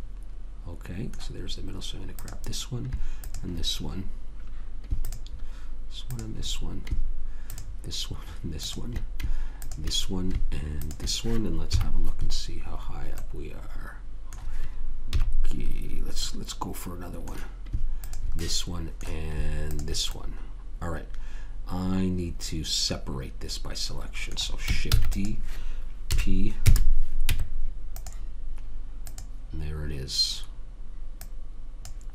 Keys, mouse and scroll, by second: 2.5-5.2 drag, 12.0 KP_3, 15.4 KP_3, 16.6-18.3 middle drag, 18.3 click, 18.8-21.7 drag, 22.0 middle click, 25.3 shift+d, 26.4 p, 27.6 Tab, 29.4 click, 31.6 click.